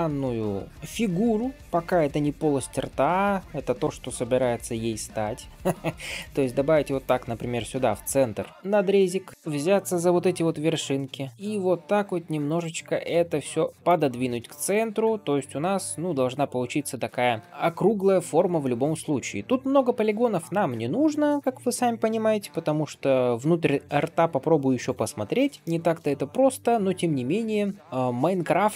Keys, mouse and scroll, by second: 2.6 ctrl+r, 7.5 shift+middle click, 7.9 middle click, 9.2 click, 9.3-9.9 scroll up 1, 10.5 g, 13.7 click, 14.5 click, 14.9 middle click, 15.5 g, 16.9-17.3 scroll down 2, 17.4 shift+middle click, 18.0 scroll up 2, 18.5 shift+middle click, 18.9 middle click, 19.4-19.8 scroll up 1, 19.8 click, 20.4 middle click, 21.2 shift+click, 22.4 g, 25.5-28.7 middle drag, 25.5-25.9 scroll down 1, 27.8-28.1 scroll up 2.